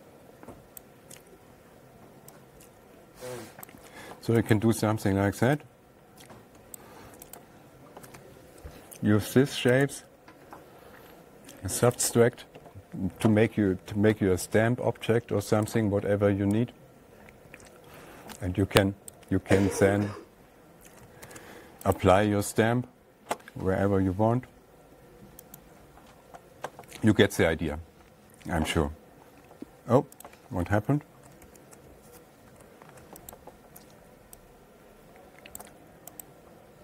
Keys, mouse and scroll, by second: 1.3 click, 4.1 click, 5.0 click, 7.2 click, 7.8 right click, 10.3 click, 12.5 click, 14.6 *, 16.2 click, 19.7 click, 21.7 ctrl+a, 22.4 right click, 26.0 click, 27.7 click, 30.7 click, 31.9 ctrl+z, 33.8 click, 36.0 click, 36.7 right click.